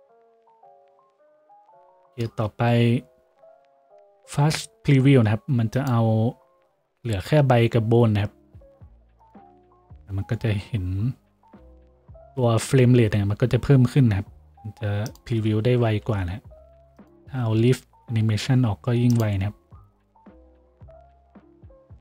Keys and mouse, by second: 1.7 z, 2.7 F6, 16.0 F6.